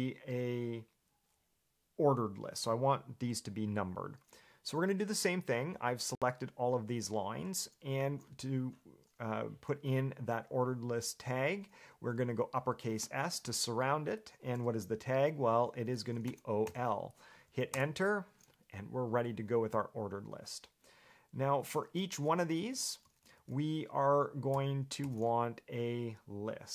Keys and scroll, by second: 15.7 shift+s, 16.4 o, 16.8 l, 17.9 Return, 21.8 Escape, 22.1-25.2 typing.